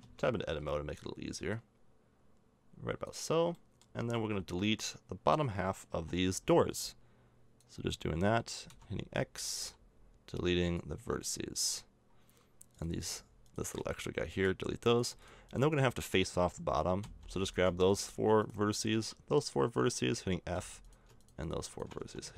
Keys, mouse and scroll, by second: 0.0 Tab, 0.4 a, 3.5 middle click, 4.7 a, 5.9 b, 6.6 click, 8.7 z, 9.1 x, 9.6 x, 11.9 middle click, 13.8 x, 17.0 f, 22.0 f.